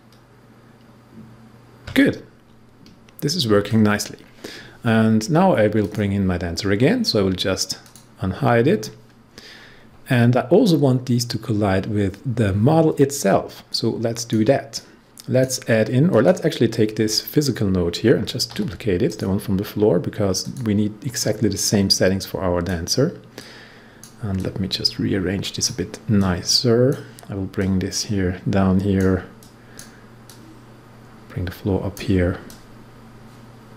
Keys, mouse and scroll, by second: 5.7 click, 13.6-16.0 drag, 18.4 ctrl+d, 19.0-33.7 drag.